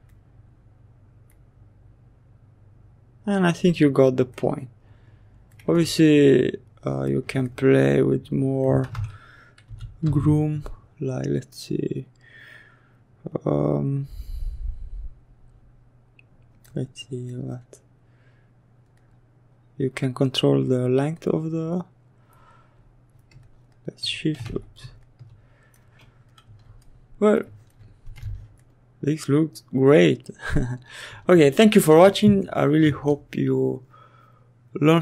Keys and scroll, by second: 7.8 ctrl+z, 8.5 b, 8.9 g, 23.9 ctrl+z.